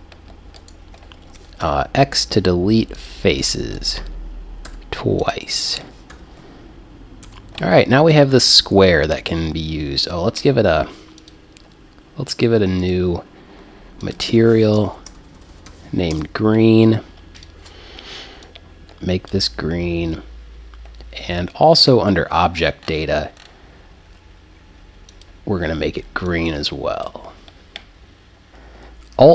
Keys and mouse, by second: 0.6 click, 1.6 x, 4.7 x, 6.1 KP_1, 7.3 Tab, 11.2-16.0 drag, 15.5 e, 17.4-19.3 drag, 21.8-27.0 drag.